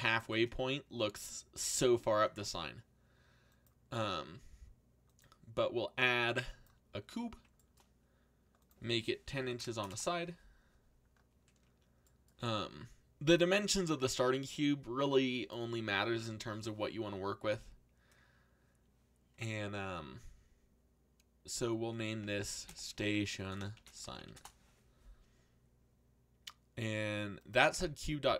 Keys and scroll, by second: 9.0-10.2 typing, 22.3-24.6 typing.